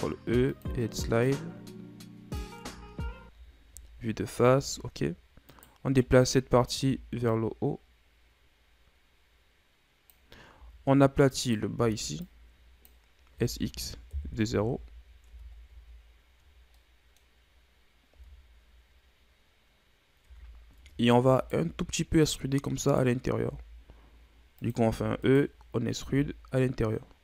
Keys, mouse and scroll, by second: 2.6 Tab, 3.6 KP_1, 4.3 a, 5.0-5.5 scroll down 1, 5.5 right click, 6.0 Tab, 6.5 a, 6.8 a, 7.3-10.3 drag, 10.5 z, 11.4 right click, 11.8 b, 13.3 s, 14.7 z, 15.3 Tab, 16.1 shift+scroll up 4, 16.8 middle click, 17.3-18.1 scroll up 2, 18.1 Tab, 20.2 Tab, 21.3 alt+right click, 22.2 e.